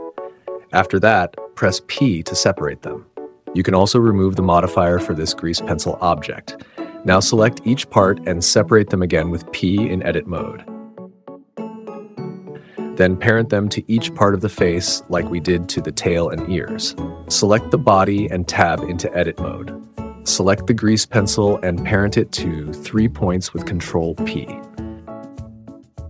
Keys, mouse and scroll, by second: 1.0 p, 3.7 Tab, 7.4 Tab, 8.2 p, 9.3 p, 10.0-11.3 drag, 10.8 p, 11.7-12.4 drag, 12.7 p, 14.1 p, 14.9-15.5 drag, 15.7 p, 16.4 Tab, 17.7-18.2 drag, 19.2 click, 19.9 click, 20.1 click, 20.8 shift+click, 21.4 shift+click, 24.1 ctrl+p, 25.6 click.